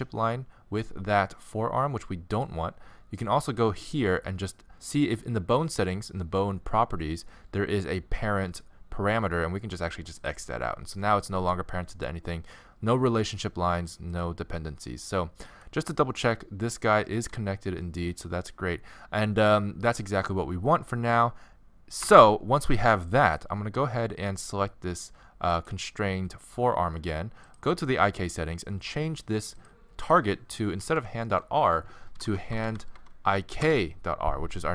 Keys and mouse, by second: 3.5-6.1 drag, 6.1-10.2 middle drag, 10.2-14.6 drag, 11.3 g, 15.5-20.4 drag, 17.2 g, 20.4-23.2 middle drag, 22.1 Tab, 23.2-25.2 drag, 25.5-27.5 right drag, 27.5-29.4 drag, 29.6-31.3 drag, 31.0 Left.